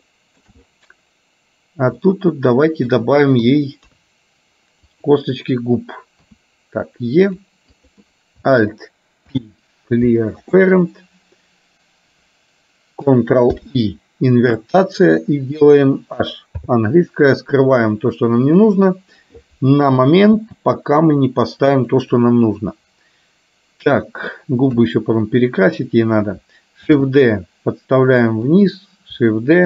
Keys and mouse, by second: 0.2 shift+middle click, 2.2 middle click, 3.5 KP_2, 3.9 KP_3, 5.0 click, 6.4 e, 7.9 click, 9.4 alt+p, 13.7 ctrl+i, 16.8 h, 18.8 click, 20.4 g, 22.8-24.4 middle drag, 24.8 KP_3, 26.9 shift+d.